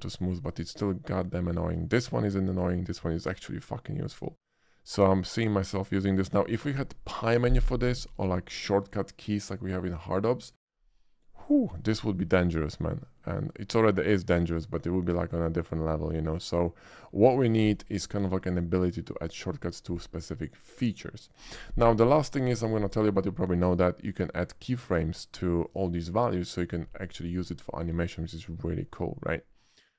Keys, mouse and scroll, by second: 0.3 shift+middle drag, 4.9-6.4 middle drag, 13.0-13.4 middle drag, 14.9-15.3 shift+middle drag, 15.6-16.9 shift+middle drag, 22.8 click, 24.8 click, 25.6 click.